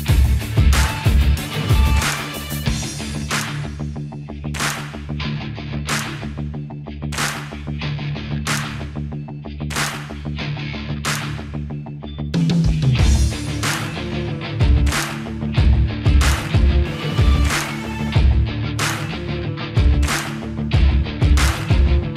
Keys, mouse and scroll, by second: 13.0 click, 16.4 ctrl+a, 18.0 click, 21.9 ctrl+z.